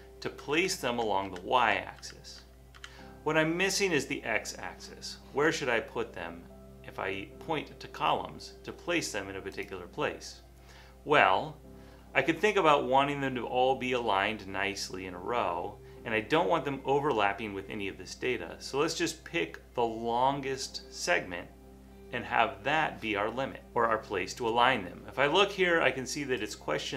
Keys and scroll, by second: 0.7 Down, 0.9 Down, 1.3 Down, 1.6 Down, 2.0 Down, 2.4 Down, 2.8 Down.